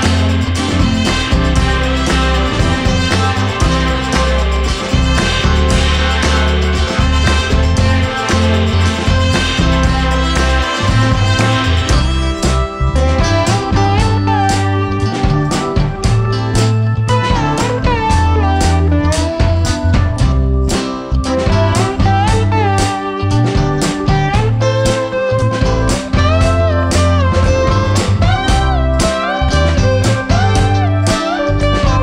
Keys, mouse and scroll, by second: 3.8 click, 12.5 click, 24.0 click, 27.0 click, 30.3 click.